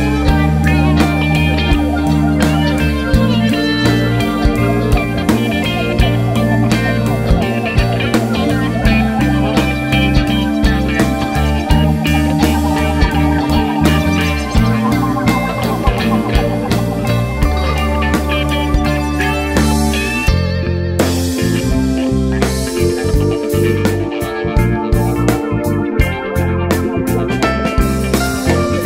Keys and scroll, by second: 26.2 3.